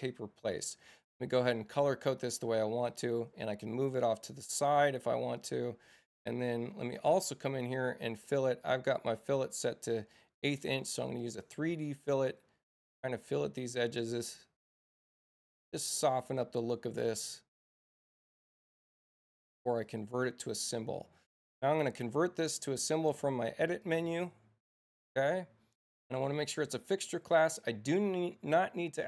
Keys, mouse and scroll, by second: 0.0 click, 2.3 space, 2.9 click, 4.0-5.4 drag, 7.7 click, 11.2 click, 12.2 click, 14.0 click, 17.8 click, 19.3 space, 19.8 click, 22.2 6, 23.8 click, 27.4 click.